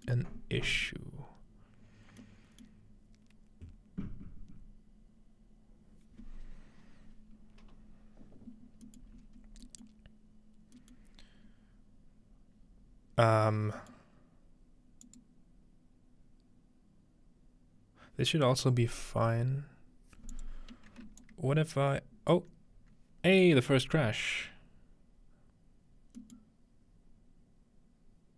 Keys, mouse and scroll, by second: 0.5-2.1 scroll down 2, 3.5-8.4 middle drag, 8.9-12.7 middle drag, 9.2-10.8 scroll up 1, 10.8 scroll up 1, 13.8-15.1 middle drag, 15.1 click, 20.3 click, 21.2-22.4 alt+drag, 26.2 middle click.